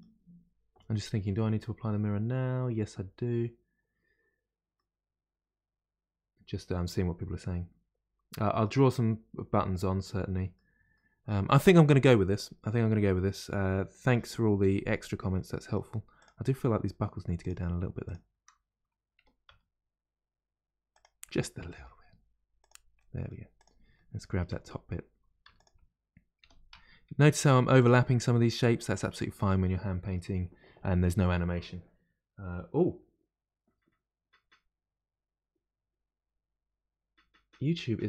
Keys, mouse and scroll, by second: 4.7-7.8 middle drag, 10.0-14.4 middle drag, 14.4-15.3 scroll up 2, 15.3 middle click, 16.2 click, 18.0 shift+click, 19.2 g, 21.2 middle click, 22.0-22.4 scroll up 2, 22.6 click, 22.9 middle click, 23.5 click, 23.9 middle click, 24.4 Tab, 25.4 2, 25.5 click, 26.4 g, 28.4 middle click, 29.0 Tab, 29.6-32.6 scroll down 1.